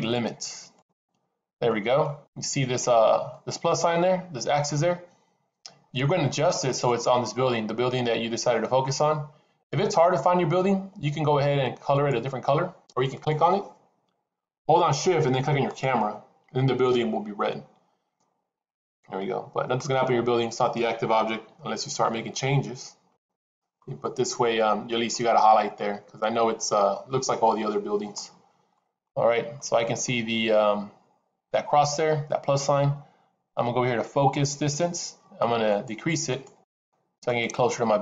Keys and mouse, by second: 0.7 click, 1.5-2.0 middle drag, 3.3-6.3 middle drag, 7.2-8.7 middle drag, 9.5-10.3 drag, 13.1 click, 21.3 s, 23.9-24.8 middle drag, 25.1-25.7 middle drag, 26.1-26.9 middle drag, 27.5 middle click, 28.6 middle click, 29.5-30.1 middle drag, 35.6 click, 36.2 click, 36.5 click, 37.3-38.0 drag.